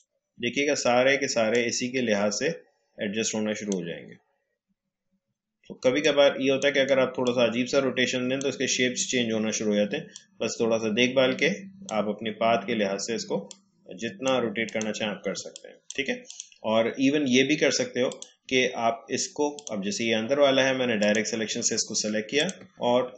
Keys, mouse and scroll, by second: 5.3 space, 6.3-14.6 drag, 15.8 space, 16.2 click.